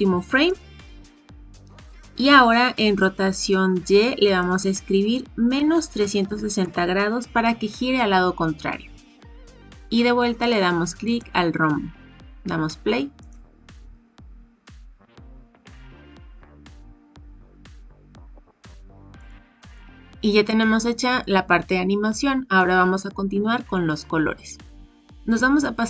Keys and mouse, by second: 0.4 click, 4.2-10.5 drag, 11.0 click, 13.2 click, 19.1 click, 19.7-20.5 drag.